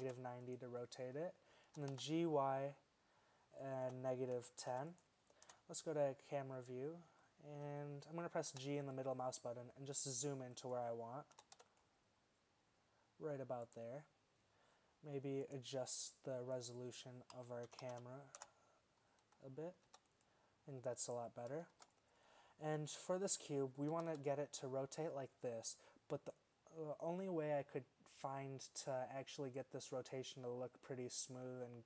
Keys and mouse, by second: 1.3-3.3 middle drag, 1.7 g, 5.5 KP_0, 8.6 g, 11.5 g, 19.9 g, 21.2-21.8 drag, 21.8 shift+z, 24.0 r.